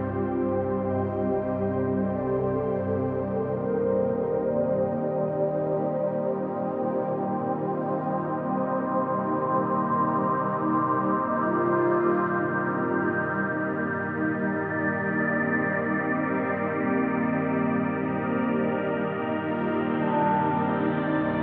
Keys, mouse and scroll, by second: 1.3-6.7 drag, 8.2 alt+click, 9.5 ctrl+s, 11.1 click, 11.9-14.6 drag, 15.6 click, 16.3 shift+click, 17.1 shift+click, 18.8 a, 19.5 Delete, 20.2-21.4 drag.